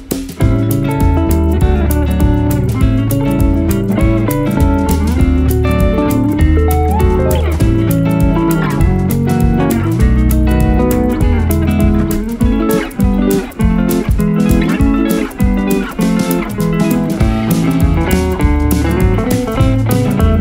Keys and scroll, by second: 1.6 shift+Page_Up, 2.5 F3, 5.7 F4, 7.6 shift+Page_Up, 8.1 Escape, 9.7 F2, 15.1 F4, 15.5 Escape.